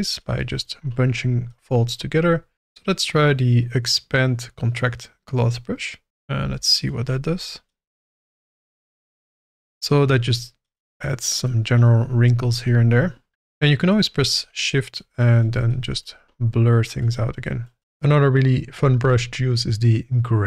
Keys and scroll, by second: 6.4 f, 17.8 ctrl+z.